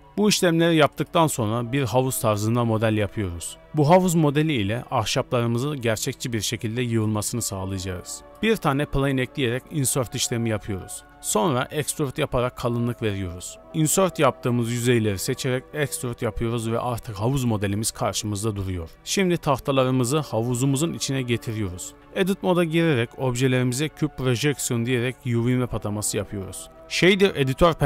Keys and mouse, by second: 0.0 ctrl+a, 0.7 click, 1.1 shift+a, 1.9 Tab, 2.3 s, 4.0 i, 5.2-7.2 typing, 7.1 alt+click, 8.5 Tab, 9.9 b, 13.5 x, 13.9 b, 14.5 g, 21.4 o, 22.0 Tab, 22.0 a, 23.0 u, 25.8 Tab.